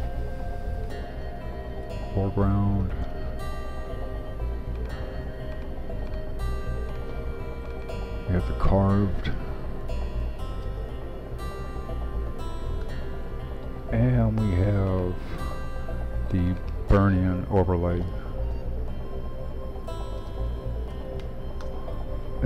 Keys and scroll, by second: 1.0-4.3 typing, 8.9-10.4 typing, 12.0-12.9 typing, 13.9-14.7 typing, 17.6-19.0 typing, 20.2-21.2 typing, 21.6 Return, 22.3 typing.